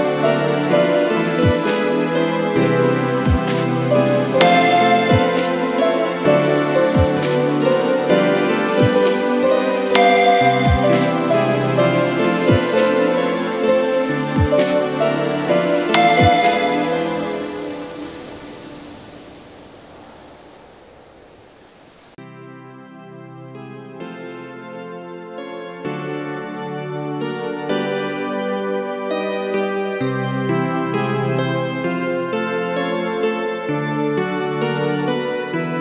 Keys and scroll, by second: 10.2 ctrl+a, 11.1 Down, 32.8 t, 33.9 BackSpace, 34.1 Return, 35.0 ctrl+a.